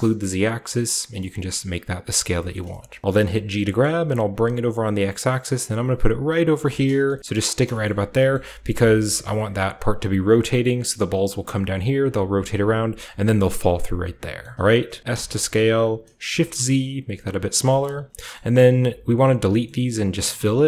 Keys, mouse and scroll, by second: 1.1 click, 1.3 scroll down 1, 2.1 shift+middle click, 2.4-3.1 shift+scroll up 1, 2.5 shift+click, 2.5 shift+middle click, 3.1 g, 3.8-5.7 middle drag, 6.5 shift+click, 6.7-10.3 shift+scroll up 3, 6.8-10.3 shift+middle drag, 7.0 g, 13.2-16.2 middle drag, 13.7-14.4 scroll up 2, 14.4-16.2 scroll up 1, 15.0 s, 16.3 shift+z, 17.4 click, 17.5-19.7 shift+drag, 17.8 middle click, 18.1 g, 18.1-19.4 scroll up 1, 18.3 middle click, 19.4-20.6 scroll up 1, 19.6-20.6 middle drag, 19.7 typing.